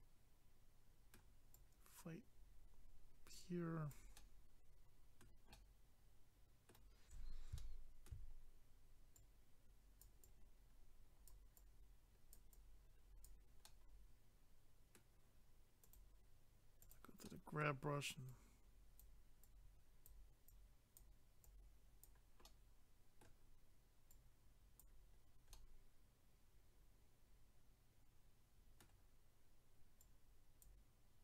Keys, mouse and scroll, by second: 1.5 click, 4.1 middle click, 7.6 shift+middle click, 8.3 scroll up 1, 9.2 click, 10.2 click, 11.6 click, 12.5 click, 13.6 middle click, 15.8 click, 15.9 click, 16.8 click, 16.9 click, 17.2 middle click, 18.3 click, 20.5 click, 21.4 click, 22.4 middle click, 24.1 click, 25.1 scroll down 1, 25.5 middle click, 30.0 click.